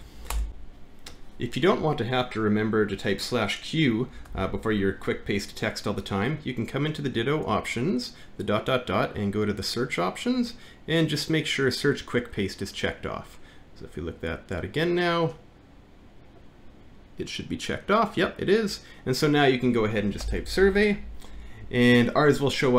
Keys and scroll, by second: 0.3 shift+BackSpace, 0.5 ctrl+F9, 4.3 alt+`, 19.7-21.3 typing.